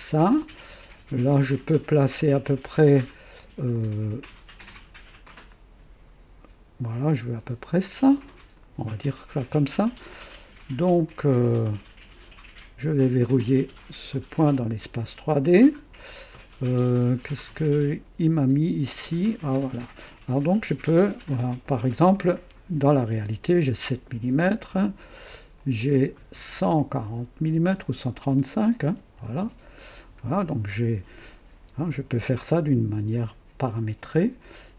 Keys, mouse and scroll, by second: 1.2 right click, 3.6 right click, 5.4-8.7 drag, 11.0 click, 13.7 click, 19.2 click, 21.0 click, 22.9 KP_7, 23.2 KP_Enter, 25.5 click, 26.7 KP_1, 26.9 KP_4, 28.2 BackSpace, 28.9 KP_3, 29.1 KP_5, 29.3 Return, 29.4 KP_Enter, 30.4 typing, 34.0 click.